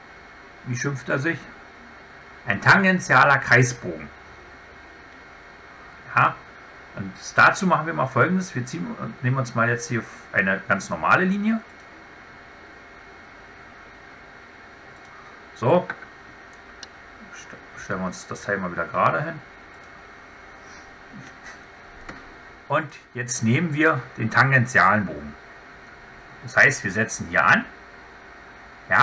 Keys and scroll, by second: 17.7 Escape.